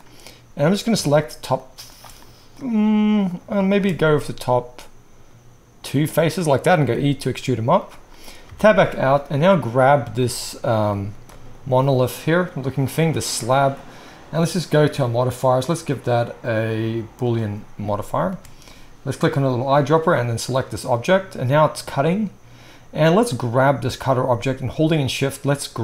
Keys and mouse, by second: 0.8 shift+middle click, 1.1 shift+click, 1.2 shift+middle click, 1.5 shift+click, 1.6-3.3 shift+middle drag, 3.3 click, 3.5 shift+middle click, 3.6 shift+click, 3.7-9.7 shift+middle drag, 6.8 e, 8.4 Tab, 9.7 click, 9.7-15.5 middle drag, 15.5-19.6 drag, 19.6-23.2 middle drag, 23.2 click, 23.4-25.0 middle drag, 25.0 shift+click, 25.2-25.8 shift+middle drag.